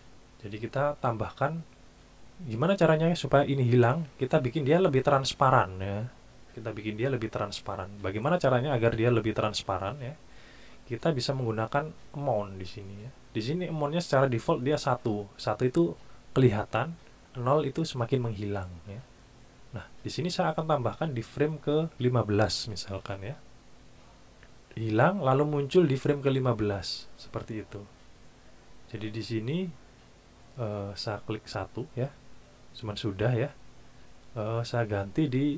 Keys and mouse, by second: 0.2 click, 11.2 click, 21.5 click, 22.6 KP_1, 22.9 KP_5, 23.1 KP_Enter, 31.5 click, 34.3 click, 34.9 click.